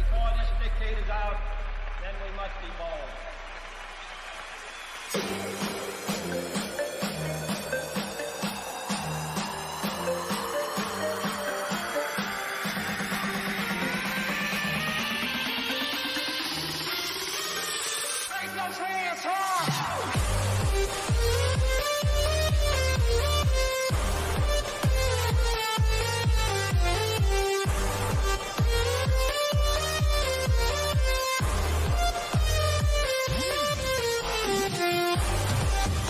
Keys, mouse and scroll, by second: 9.1 click, 11.9 click, 12.6 scroll up 1, 15.9 click, 19.6 click, 25.0 click, 25.1 click, 29.3 scroll up 1, 30.8 click.